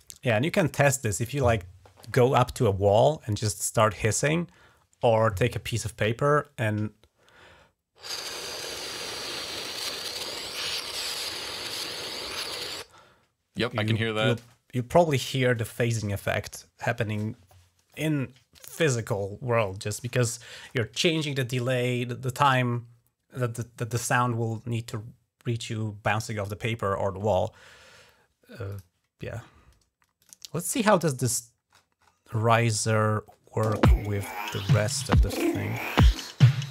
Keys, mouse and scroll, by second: 28.5 click, 30.0 click, 31.5 scroll up 1, 31.8 scroll down 1, 32.1 scroll up 1, 33.1 scroll down 2, 33.5 space, 34.1 click, 34.4-35.1 scroll down 2, 35.5 scroll down 1.